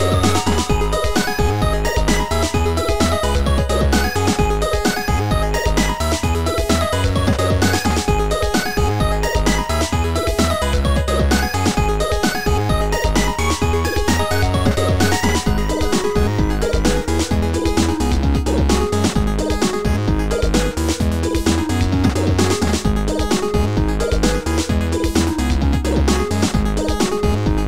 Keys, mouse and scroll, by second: 0.9 click, 3.6 ctrl+z, 6.2 ctrl+z, 6.6 click, 17.2 click, 18.7 click, 19.9 click, 23.4 Up, 23.4 click, 23.7 Up, 23.7 click, 24.8 Down, 27.0 click.